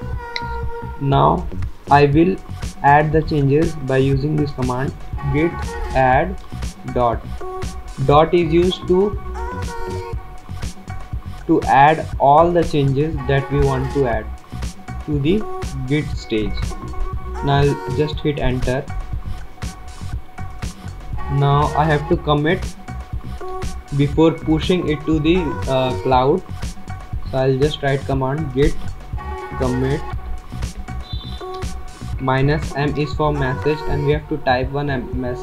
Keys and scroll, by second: 2.8 typing, 4.1-7.6 typing, 18.8 Return, 22.2-23.6 typing, 29.2-34.4 typing.